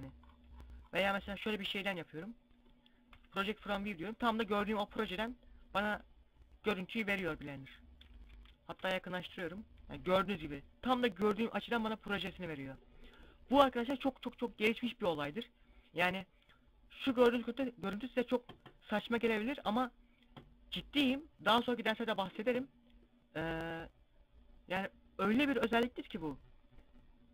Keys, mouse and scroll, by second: 0.5 scroll up 3, 0.6 middle click, 2.7 u, 3.9 scroll up 1, 5.5 middle click, 5.5 scroll up 1, 6.5 scroll up 1, 6.8 middle click, 7.6 scroll up 2, 8.3 u, 12.0 scroll down 1, 12.7 middle click, 12.7-15.2 scroll down 1.